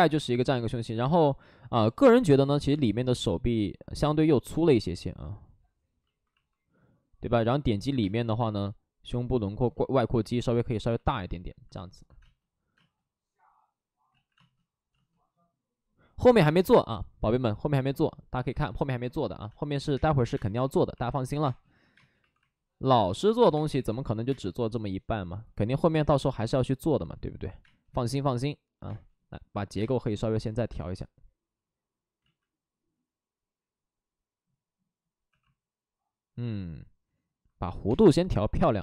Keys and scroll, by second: 1.0 space, 1.7 space, 2.6 space, 4.5 space, 7.9 space, 10.8 ctrl+z, 12.1 space, 12.7 space, 14.0 ctrl+z, 14.3 space, 19.7-21.3 typing, 26.3 ctrl+z, 27.6 space, 30.6 space, 32.1 ctrl+z, 35.2 2, 37.7 ctrl+z, 37.9 space.